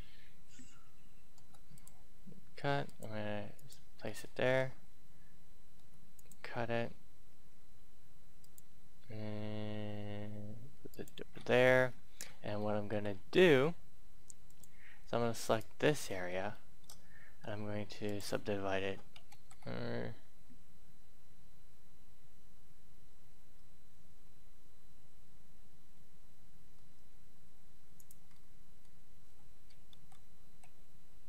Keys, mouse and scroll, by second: 1.3 k, 1.7 click, 4.0 scroll down 1, 5.7 k, 6.1 click, 11.3-11.8 scroll up 1, 11.8 scroll down 1, 12.5-13.7 middle drag, 14.4 click, 15.4 right click, 16.0 middle click, 17.4 shift+middle click, 18.0 click, 19.3 ctrl+z, 23.0 q, 26.7 e, 27.9 click, 28.3 middle click, 29.9 ctrl+z.